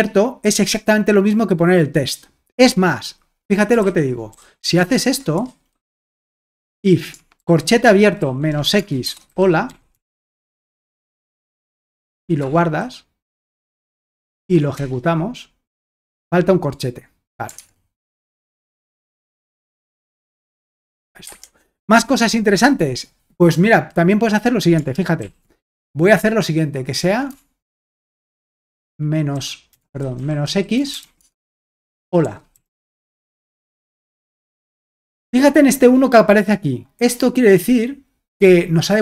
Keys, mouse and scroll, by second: 4.1-12.7 typing, 5.3 Escape, 14.4 alt+Tab, 17.6 alt+Tab, 18.3-18.9 typing, 19.2 Escape, 21.2 Escape, 25.2 ctrl+l, 27.3-34.0 typing.